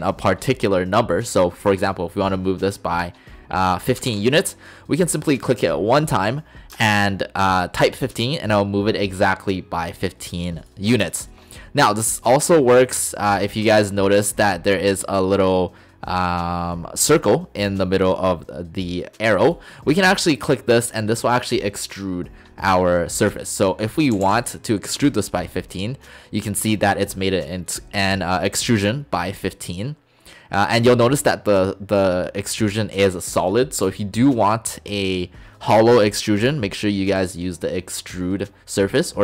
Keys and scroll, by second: 4.1 typing, 6.8 Return, 24.2 typing, 25.0 Return.